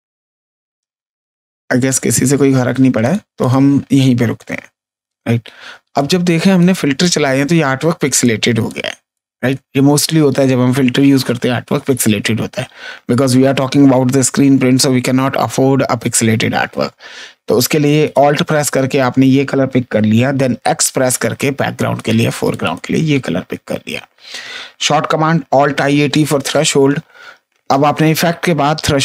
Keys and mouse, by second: 2.9 click, 5.5 space, 5.9 ctrl+click, 6.9 click, 8.1 ctrl+click, 9.1 click, 20.4 x, 21.7 click, 25.2 alt+a, 25.6 alt+t.